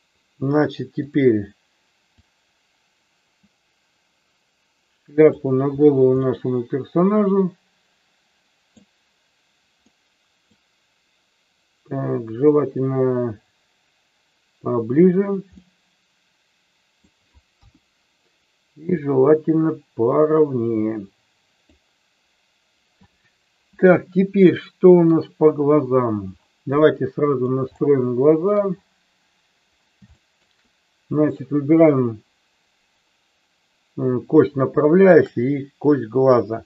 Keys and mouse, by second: 2.1-5.4 drag, 6.4-8.8 middle drag, 9.8 middle click, 12.7-15.1 drag, 15.6-17.1 middle drag, 17.5 KP_1, 18.9-21.7 drag, 24.1-25.2 middle drag, 27.1 middle click, 27.9 shift+middle click, 30.2 shift+middle click, 31.1-32.9 drag, 35.1 shift+click.